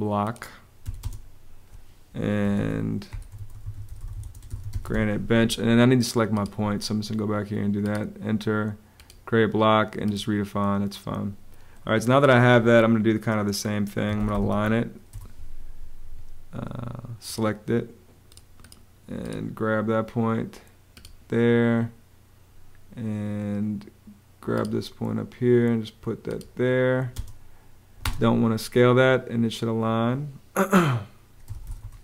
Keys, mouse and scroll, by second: 0.5 b, 0.7 space, 2.3-5.1 typing, 13.5-14.7 typing, 14.8 Return, 26.8 space, 30.9-31.9 typing.